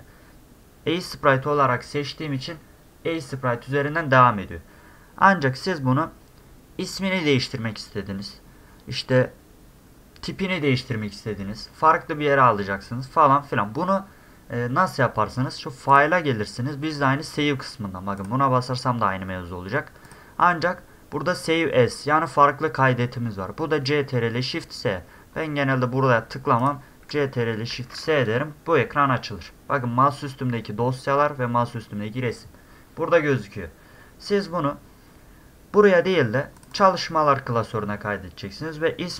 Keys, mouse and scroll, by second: 4.8-8.2 middle drag, 15.9 click, 18.2 click, 20.0 click, 26.6 click, 27.7 ctrl+shift+s, 36.6 click, 36.7 click.